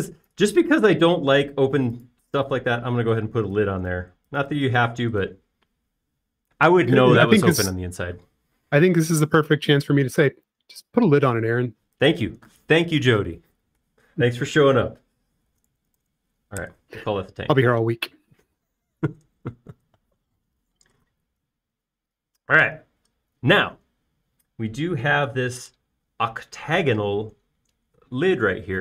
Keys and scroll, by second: 2.2 |, 4.0 space, 16.3-17.5 typing, 17.7 Return.